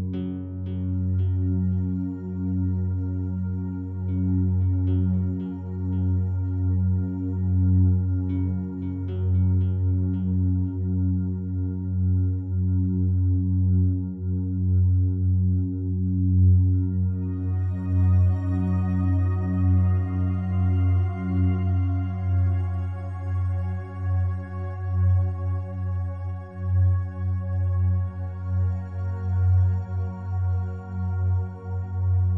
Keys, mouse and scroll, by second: 1.1 ctrl+r, 1.8 click, 2.3 right click, 10.7 ctrl+Num_Lock, 10.9 ctrl+z, 12.9 right click, 16.1 right click, 17.1 shift+right click, 19.3-21.2 alt+drag, 21.2-22.7 alt+drag, 22.7 shift+right click, 24.6-26.7 alt+drag, 26.8 click, 31.8 click.